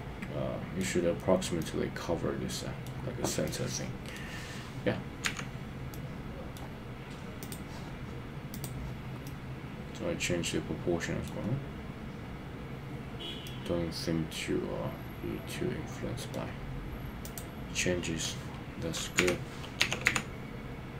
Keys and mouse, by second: 1.6-2.9 middle drag, 3.4 middle click, 5.3 KP_1, 5.9 middle click, 7.4 click, 9.2-11.3 middle drag, 13.5-16.3 middle drag, 19.2 KP_3, 19.9 g, 20.2 z.